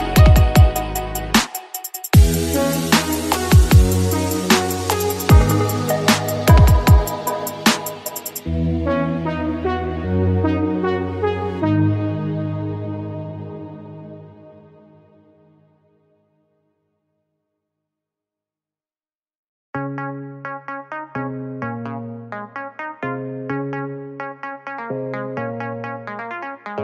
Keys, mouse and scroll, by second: 6.1 click, 6.5 click, 9.1 s, 10.3 z, 11.2 click, 11.6 Tab, 12.3-12.8 middle drag, 12.8 click, 15.3 click, 16.3-21.2 drag, 21.2-22.1 scroll down 3, 22.1 click, 22.8-23.7 middle drag, 23.7-25.0 drag, 25.0 shift+a.